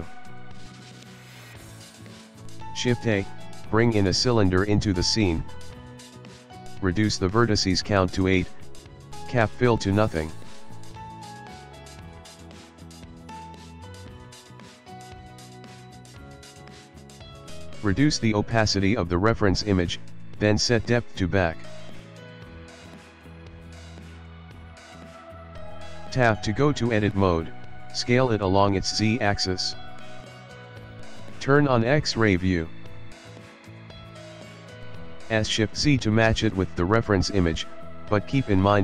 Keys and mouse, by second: 0.8 ctrl+middle click, 1.5 shift+middle click, 1.7 shift+middle click, 2.0 ctrl+middle click, 2.7 shift+a, 5.7 click, 6.9 click, 9.6 click, 12.4 click, 13.5 ctrl+middle click, 14.6 shift+middle click, 15.3 click, 16.1 click, 17.1 click, 17.9 click, 20.7 click, 22.5 click, 23.3 shift+middle click, 23.5 shift+middle click, 23.7 ctrl+middle click, 23.8 ctrl+middle click, 24.1 shift+middle click, 24.4 click, 24.8 Tab, 25.8 click, 26.3 click, 26.6 Tab, 27.7 s, 31.9 click, 32.5 shift+middle click, 32.8 shift+middle click, 33.2 ctrl+middle click, 33.4 ctrl+middle click, 33.7 shift+middle click, 34.8 s.